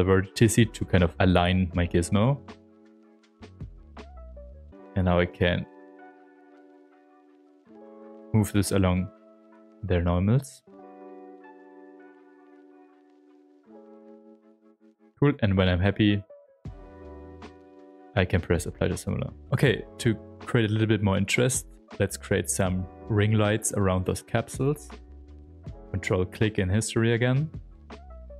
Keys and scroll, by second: 4.6 s, 7.2 s, 8.1 s, 14.0 q, 17.1 shift+f, 22.2 s, 22.8 s, 27.3-28.3 typing.